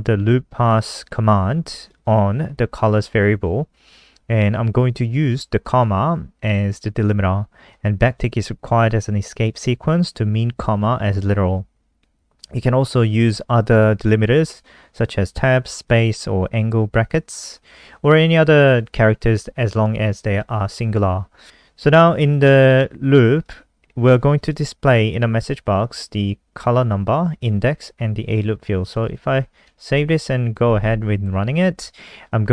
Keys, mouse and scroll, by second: 0.7 click, 0.8 click, 1.8 click, 1.9 click, 5.3 click, 7.9 click, 14.4 click, 29.6 ctrl+s, 30.0 F5.